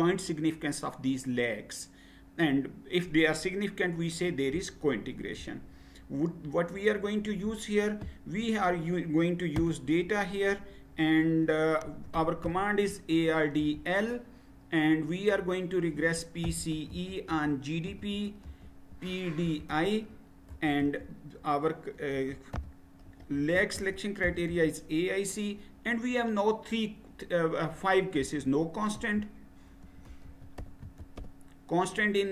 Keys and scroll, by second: 9.6 Return, 11.6-13.6 typing, 15.9-20.8 typing, 21.9-24.5 typing, 27.9-31.7 typing.